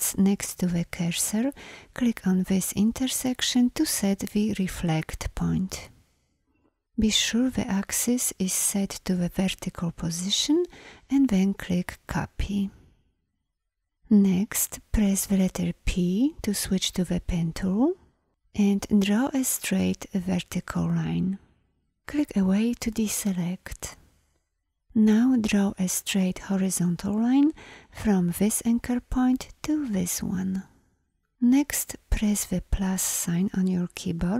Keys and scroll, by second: 15.0 p, 32.9 =.